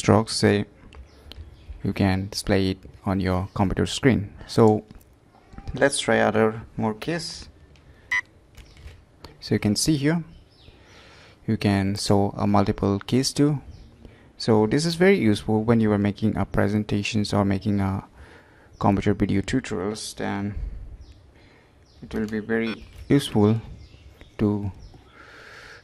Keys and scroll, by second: 1.3 alt+space, 8.1 ctrl+shift+Caps_Lock, 8.6 ctrl+shift+Escape, 22.6 ctrl+shift+Caps_Lock, 22.8 ctrl+shift+Escape.